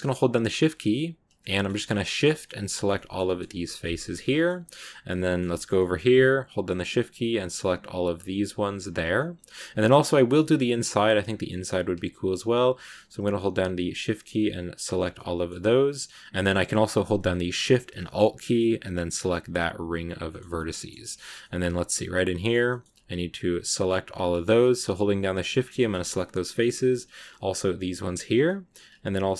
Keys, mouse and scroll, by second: 0.0 shift+right click, 0.4 shift+right click, 1.0 shift+right click, 1.3 scroll down 1, 1.4 middle click, 1.9 shift+right click, 2.1 middle click, 2.6 shift+right click, 2.8 shift+middle click, 3.8 shift+right click, 4.0 scroll down 1, 4.1-6.5 middle drag, 6.5 shift+right click, 6.8 shift+right click, 7.3 shift+right click, 8.2 shift+right click, 9.0-10.8 middle drag, 10.8-11.4 scroll up 2, 11.4 middle click, 12.2 shift+right click, 12.8 shift+right click, 13.3 shift+right click, 14.1 shift+right click, 15.0 middle click, 15.5-16.6 scroll up 1, 16.6-18.8 scroll up 2, 18.8 alt+shift+right click, 19.9 scroll down 2, 20.2-22.5 shift+middle drag, 22.5 scroll up 1, 22.6 middle click, 23.4 shift+right click, 24.7 shift+right click, 25.4 scroll down 2, 25.7 shift+middle click, 26.4 scroll up 2, 26.9 shift+right click, 27.2 shift+right click, 27.6 shift+right click, 28.3 middle click, 29.1 shift+right click.